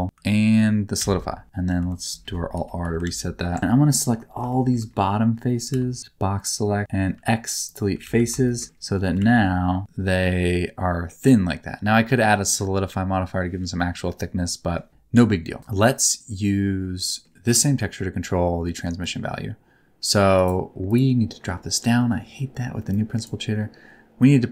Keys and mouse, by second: 0.9 ctrl+a, 1.6 alt+r, 2.5 KP_1, 2.8 KP_3, 3.0 alt+z, 3.6 Tab, 4.0 1, 4.4 shift+middle click, 5.7 b, 7.0 x, 8.0 alt+z, 8.4 shift+middle click, 8.6 Tab, 9.0 r, 9.8 middle click, 9.8 r, 11.0 middle click, 12.0 middle click, 13.8 middle click, 17.1 middle click, 19.2-20.4 drag, 21.3 middle click, 22.9 click, 23.0 click, 24.4-24.5 drag.